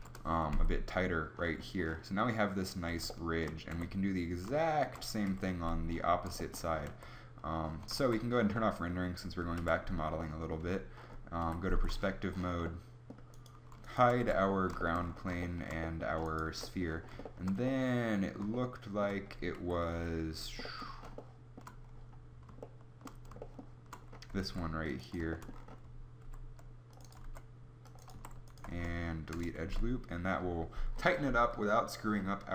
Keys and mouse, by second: 0.7 Tab, 3.8 Tab, 5.2 KP_7, 5.4 z, 7.0 Tab, 7.8 z, 8.4 z, 9.5 KP_Decimal, 10.8 z, 11.3 KP_5, 11.6 z, 14.2 h, 16.5 Tab, 19.5 KP_3, 19.9 KP_5, 24.4 ctrl+r, 26.2 ctrl+r, 27.1 ctrl+r, 28.1 a, 28.6 space, 29.6 Tab.